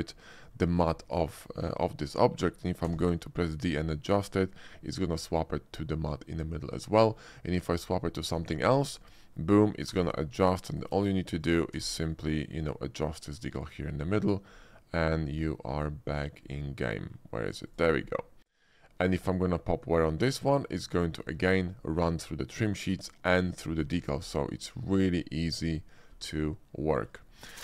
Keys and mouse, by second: 1.6 shift+click, 2.9 d, 5.0 click, 7.0-8.5 drag, 10.0 d, 11.5 click, 11.8 d, 17.8 click, 19.2 click, 26.9 shift+click, 27.4 middle click.